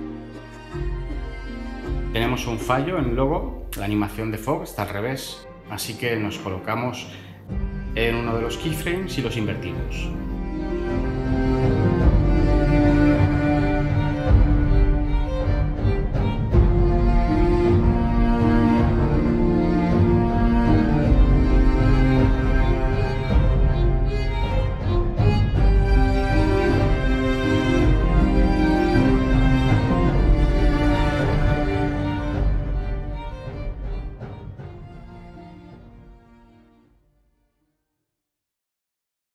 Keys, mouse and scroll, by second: 5.0 Right, 9.4 Right, 11.9 Left, 15.6 0.